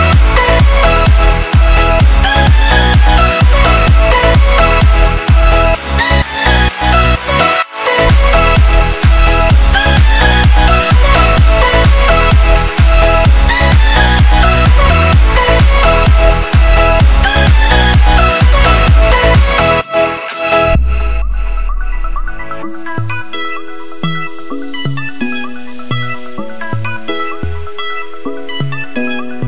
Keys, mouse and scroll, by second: 0.3 click, 1.3 click, 3.6 ctrl+z, 4.0 click, 6.4 Return, 7.1 ctrl+u, 7.7 click, 11.8 Delete, 12.4 click, 12.7 Delete, 13.5 click, 14.2 click, 17.5 Return, 17.7 click, 19.0 alt+scroll up 2, 20.3 click, 22.6 Return, 23.1 Up, 23.7 ctrl+0, 24.5 click, 27.8 ctrl+c, 28.0 alt+Tab, 29.1 click.